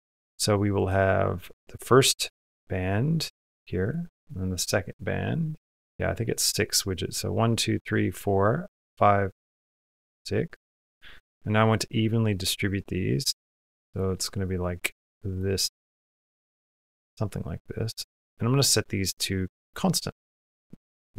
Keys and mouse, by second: 0.4 click, 3.7 click, 8.7-13.8 drag, 14.3 click, 15.7 click, 17.2-18.2 drag, 18.4-19.6 drag, 20.4 middle click.